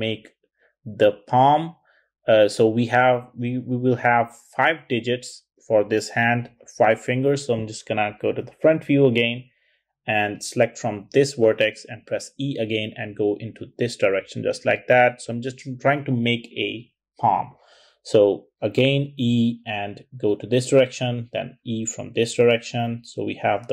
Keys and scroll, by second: 7.2 `, 11.2 e, 17.3 e, 20.6 typing.